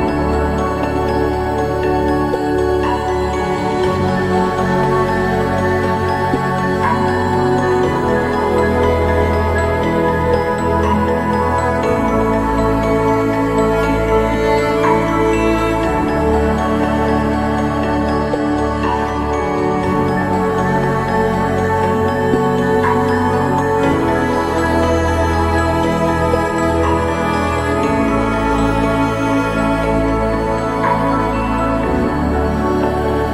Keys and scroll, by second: 25.5 ctrl+z.